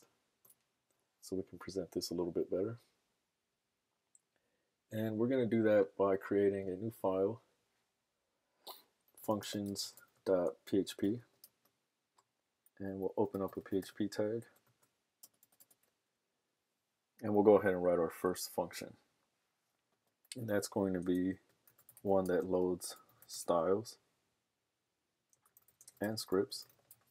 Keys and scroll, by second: 8.9-11.6 typing, 13.3-14.6 typing, 17.1 Return, 20.3 Up, 20.3-27.1 typing.